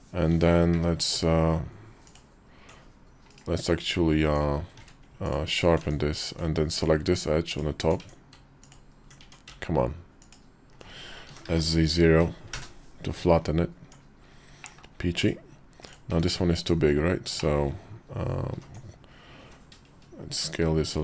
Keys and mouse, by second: 0.1 Tab, 0.5 q, 4.0 Tab, 4.6 q, 5.7 Tab, 6.5 alt+click, 7.3 alt+click, 7.8 Tab, 8.4 alt+click, 9.0 Tab, 10.0 alt+click, 11.0 s, 13.6 Tab, 14.4 middle click, 14.9 /, 15.9 `, 16.5 KP_5, 17.1 shift+click, 18.3 alt+z, 19.2 s.